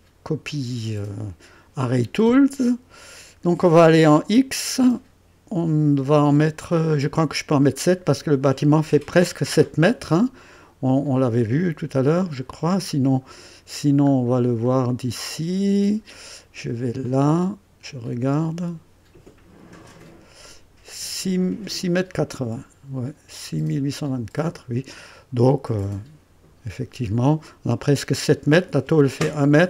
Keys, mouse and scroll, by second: 12.3 click, 13.3-13.6 scroll down 2, 14.1 scroll down 2, 14.6-16.1 drag, 17.0 click, 19.7 click, 24.1 click, 27.1 click.